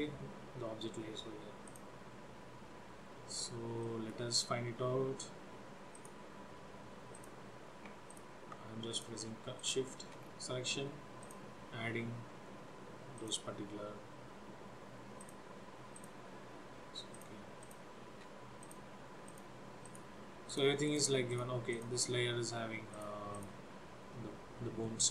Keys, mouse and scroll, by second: 1.8 click, 3.5 scroll up 2, 3.9 middle click, 6.0 click, 7.2 click, 8.2 ctrl+click, 9.0 click, 9.6 shift+click, 10.3-11.1 scroll down 2, 11.3 shift+click, 13.3 shift+click, 15.3 shift+click, 16.1 shift+click, 17.3 shift+click, 17.7 shift+click, 18.7 click, 19.3 click, 19.9 click, 20.6 click, 21.0 click, 21.4 click, 21.8 click, 23.0 click, 23.4 click, 24.9 middle click.